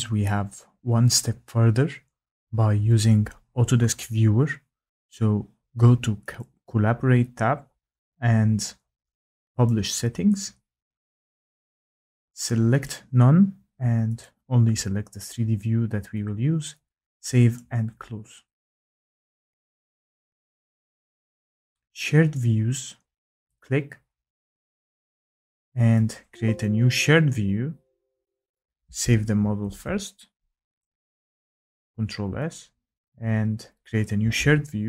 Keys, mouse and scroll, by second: 6.4 click, 9.6 click, 12.8 click, 14.2 click, 17.5 click, 23.5 click, 26.1 click, 28.5 click, 29.6 ctrl+s, 30.8 click, 32.5 click.